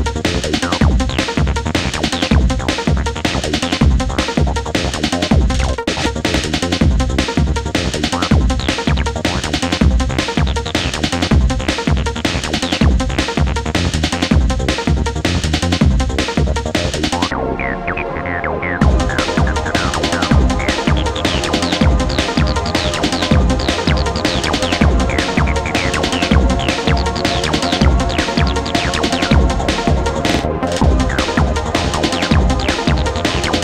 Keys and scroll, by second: 7.3 ], 20.7 ], 22.3 ], 24.0 ].